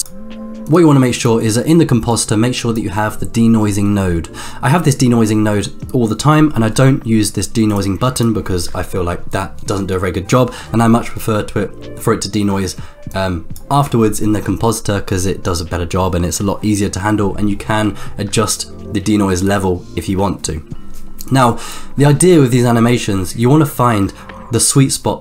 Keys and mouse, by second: 0.6 click, 2.2 click, 7.7 click, 8.1 click, 13.1 click, 21.5 click.